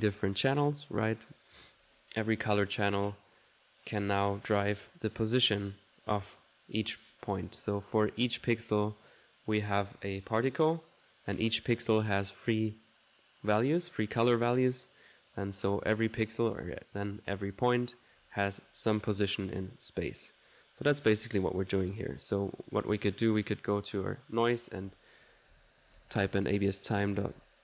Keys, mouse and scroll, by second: 9.3 click, 20.9 middle click, 21.3 click, 22.0 click, 22.6 click, 23.6 click, 24.2-25.3 drag.